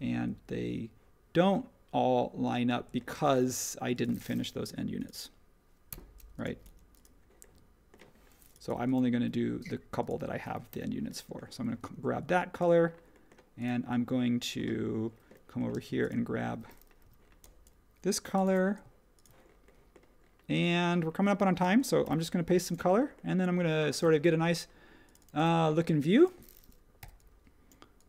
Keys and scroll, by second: 3.1 space, 5.9 BackSpace, 6.6 BackSpace, 10.7 b, 15.7 space, 17.0 h, 18.4 b, 21.6-22.0 typing, 24.0 space, 27.0 p.